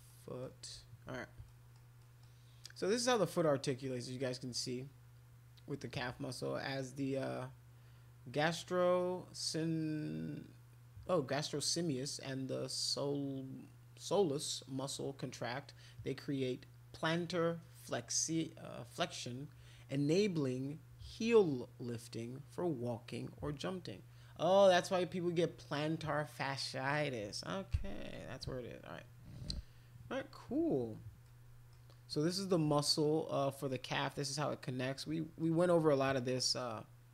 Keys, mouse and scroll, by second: 0.0 middle click, 1.5 middle click, 2.0 middle click, 31.2 middle click, 35.1 middle click, 36.0-37.1 middle drag.